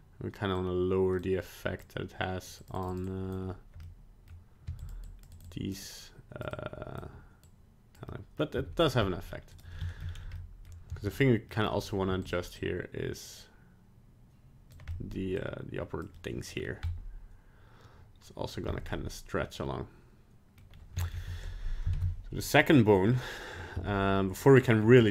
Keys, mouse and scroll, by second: 0.5 click, 1.8-2.9 click, 2.6 click, 2.7 click, 3.0 click, 3.8 middle click, 4.6 f, 5.0 click, 5.3 click, 5.5 click, 5.8 click, 6.5 click, 7.4 click, 8.0 middle click, 8.5 f, 9.8 shift+middle click, 10.0 scroll down 2, 10.3 middle click, 10.9 f, 11.4 middle click, 11.8 scroll up 1, 12.0 f, 12.6 click, 14.9 middle click, 15.4 click, 16.1 middle click, 16.5 scroll down 2, 16.8 middle click, 18.6 middle click, 18.6 scroll up 2, 18.9 middle click, 20.6 middle click, 20.7 scroll down 1, 21.0 shift+middle click, 21.1 shift+middle click, 21.9 ctrl+Tab, 23.0 scroll down 2, 23.7 z, 24.6 middle click, 25.0 scroll up 1.